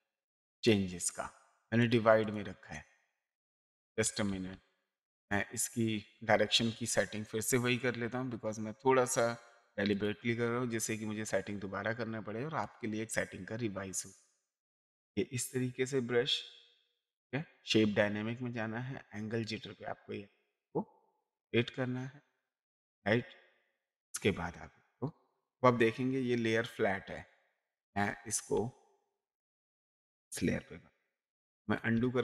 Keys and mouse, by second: 3.8 ctrl+z, 9.9 click, 12.6 click, 14.0 click, 17.1 click, 19.4 click, 23.7 click, 32.0 ctrl+z.